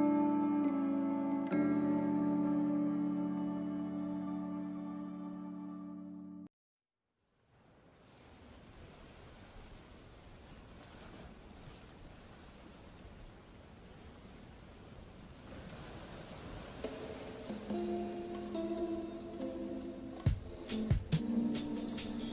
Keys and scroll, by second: 3.8 scroll down 1, 4.0 scroll up 1, 5.3 ctrl+z, 8.7 scroll down 1, 8.8 scroll up 1, 9.6 [, 12.2 scroll down 1, 12.3 scroll up 1.